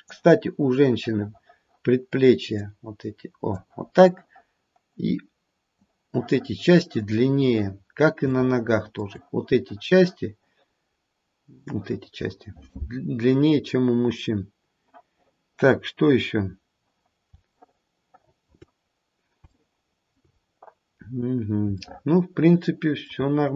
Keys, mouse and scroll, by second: 2.6 click, 4.9 click, 7.1-7.9 scroll down 3, 8.4 shift+middle click, 9.0 shift+middle click, 10.9-11.5 scroll up 2, 13.6-14.1 scroll down 1, 17.6 shift+middle click, 18.7-19.3 scroll down 2, 19.7 shift+middle click, 20.1 shift+middle click, 20.4 scroll up 2, 21.6 scroll up 1, 21.8 shift+middle click, 23.2-23.5 scroll up 2.